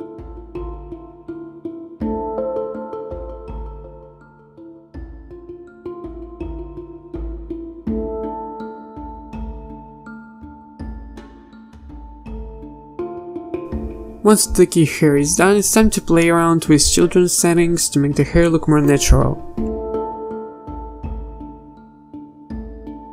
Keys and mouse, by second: 0.0-3.6 typing, 2.2 right click, 4.6 a, 5.0 ctrl+s, 5.6 l, 6.5 ctrl+z, 6.7 ctrl+s, 6.9 l, 7.1 l, 8.1 a, 8.2 ctrl+s, 8.7 click, 9.5 click, 10.2-11.2 typing, 13.3 z, 13.4 l, 13.5 z, 13.9 a, 13.9 ctrl+s.